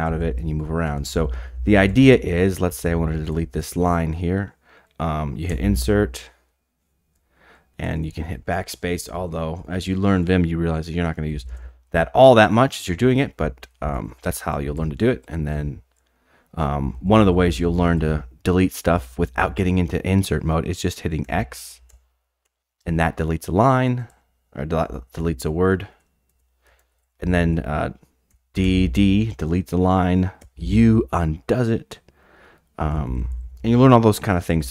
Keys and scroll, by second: 0.1-3.7 typing, 5.5 typing, 7.8-9.9 typing, 10.7 Delete, 11.0-19.1 typing, 21.2-24.6 typing, 25.9-27.2 typing, 28.3-29.1 typing, 30.4 typing, 32.8-34.7 typing.